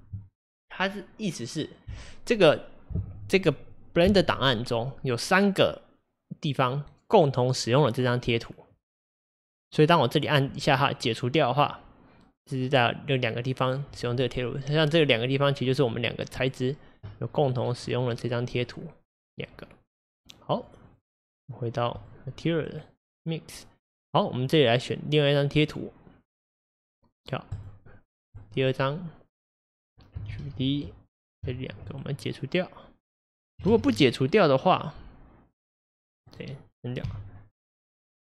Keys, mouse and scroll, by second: 10.5-20.6 drag, 22.1-28.4 drag, 29.7 click, 30.3 shift+d, 32.2-33.7 drag, 33.7 ctrl+z, 36.3 click, 37.0 x.